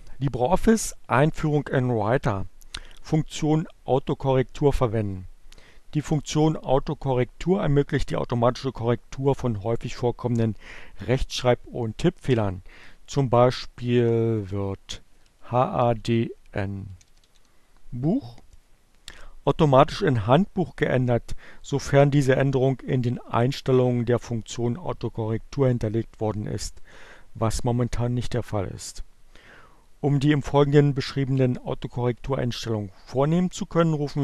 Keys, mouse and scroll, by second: 14.8-17.9 typing.